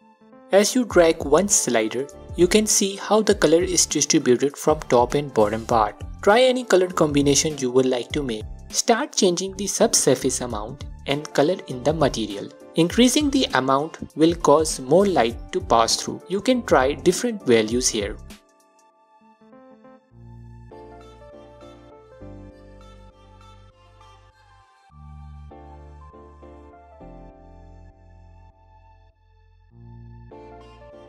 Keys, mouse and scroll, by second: 5.0-5.5 scroll down 2, 8.5-10.4 middle drag, 10.2 scroll up 2, 11.1 drag, 15.2-18.2 drag, 18.4 scroll down 1, 19.6-20.5 scroll up 1, 20.5 click, 21.8 click, 22.4-24.1 alt+drag, 23.6-24.1 scroll up 1, 24.1 middle click, 24.7 middle click, 25.5 click, 26.9 scroll down 1, 27.8-28.1 scroll up 2, 28.6-31.0 drag.